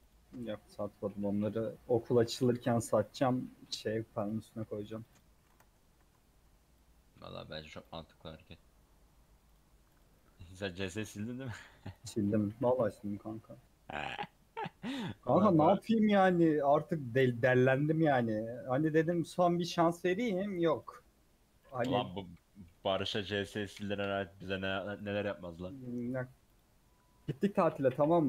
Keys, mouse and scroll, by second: 0.1 alt+n, 0.4 Tab, 0.8 click, 2.1 a, 4.3-28.2 drag.